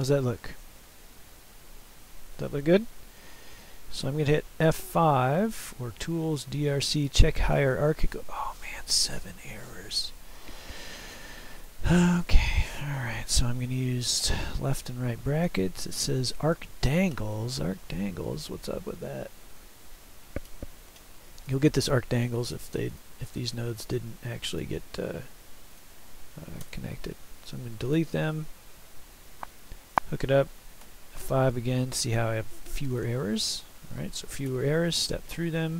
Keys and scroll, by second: 14.3 <, 26.7 Delete, 30.9 F5, 34.5 <.